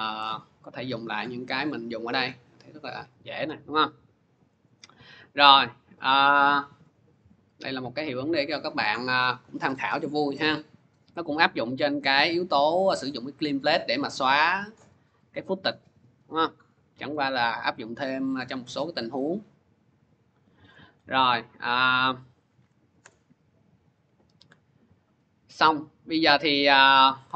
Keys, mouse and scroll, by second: 0.1 click, 2.1 click, 3.1 click, 4.6 click, 11.8 click, 12.7-16.8 drag, 20.5 click, 20.9 click, 21.8 click, 22.4 Delete, 23.9 click, 24.9 click, 26.5 click, 27.2 click.